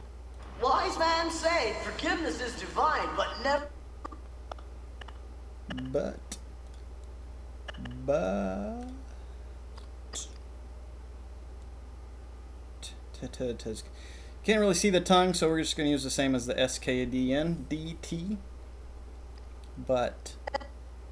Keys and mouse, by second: 0.3 click, 2.7 middle click, 3.4 click, 4.0-5.9 drag, 6.6 click, 7.6-8.2 drag, 9.7-15.1 drag, 15.4 click.